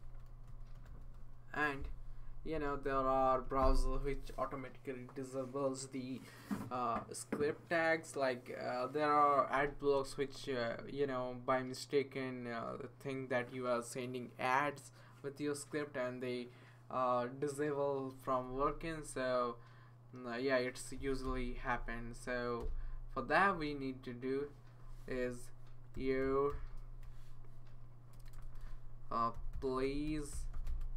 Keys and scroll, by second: 0.0-1.7 typing, 3.3 Return, 20.7-21.7 typing, 22.2 Down, 22.6 Return, 25.7-30.9 typing.